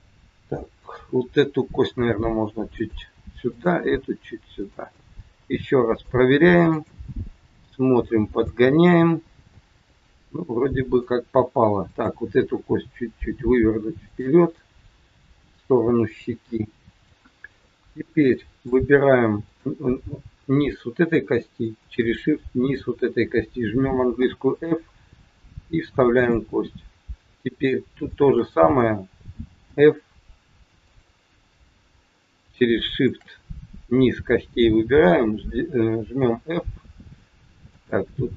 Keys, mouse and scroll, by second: 0.8 click, 1.9 g, 3.4 click, 3.8 g, 4.9 middle click, 6.7 click, 7.4 g, 9.5 middle click, 11.9 click, 12.7 g, 14.5 middle click, 18.3 shift+middle click, 19.4 click, 21.5 shift+click, 24.0 f, 24.8-25.3 scroll up 3, 26.0 click, 28.0 shift+click, 29.5 f, 30.8 click, 32.9 shift+click, 36.2 f, 37.7 click.